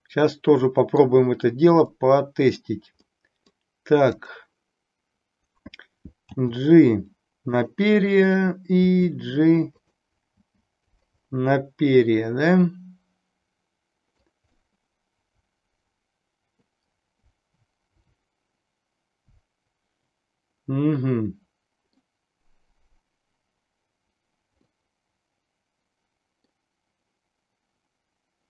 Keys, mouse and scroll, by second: 1.9 middle click, 3.1 middle click, 6.3 g, 7.6 click, 8.2 click, 8.8 g, 9.8 click, 10.3 g, 10.9 click, 11.2-14.2 middle drag, 14.6-22.0 middle drag, 24.7-26.6 middle drag.